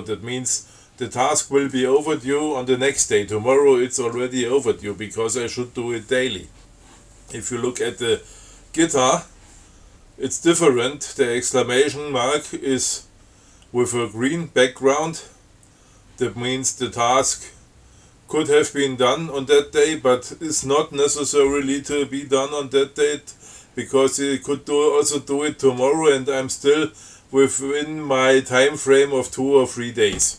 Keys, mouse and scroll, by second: 15.1 click, 28.1 scroll down 2.